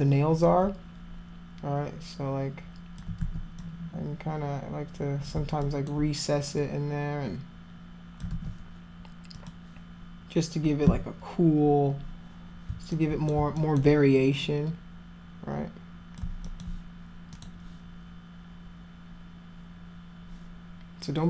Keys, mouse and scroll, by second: 0.5-3.0 drag, 3.2 ctrl+z, 3.6-5.3 drag, 5.6 alt+click, 6.6-8.2 drag, 8.3 ctrl+z, 9.4 click, 12.9 alt+click, 13.6 alt+click, 14.4-16.2 drag, 16.5 alt+click, 17.4 click.